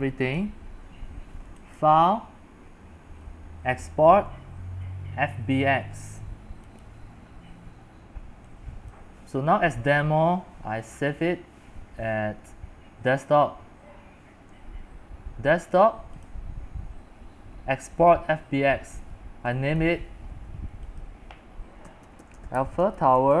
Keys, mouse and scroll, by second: 21.6-23.4 typing.